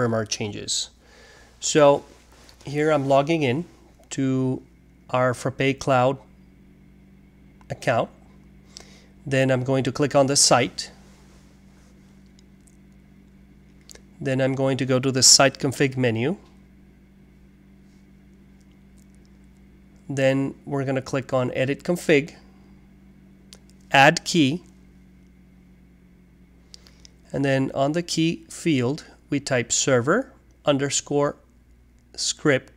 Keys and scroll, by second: 0.0-3.9 typing, 0.2 alt+2, 29.2-32.7 typing.